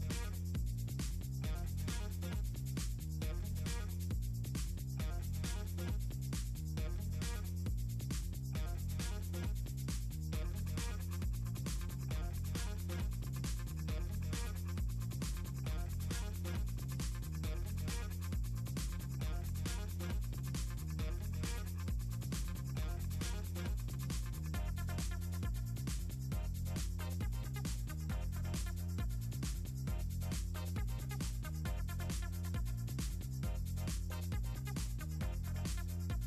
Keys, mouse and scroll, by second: 0.2 click, 0.7 click, 1.0-1.3 scroll up 4, 1.4 click, 1.9 b, 3.1 scroll down 2, 4.0 click, 4.3 click, 5.3 middle click, 5.8 middle click, 7.3 click, 8.2 middle click, 9.3 click, 10.7 click, 11.6 click, 11.9 click, 12.2 ctrl+click, 15.6 ctrl+x, 16.0 click, 16.3 right click, 16.9 click, 19.1 click, 20.5 click, 23.9 click, 25.6 click, 26.0 click, 26.4 scroll down 2, 26.6 scroll up 2, 27.3 click, 29.2 click, 29.6 right click, 29.9 click, 30.9 click, 32.7 click, 33.9 click, 35.7 click.